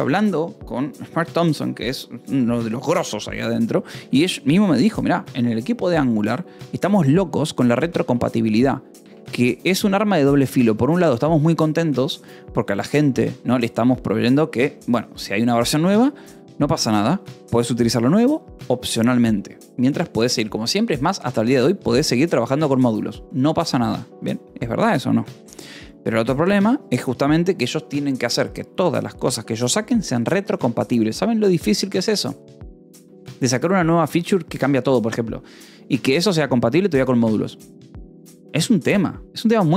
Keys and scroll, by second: 4.4 Escape, 8.7 shift+v, 8.9 Escape.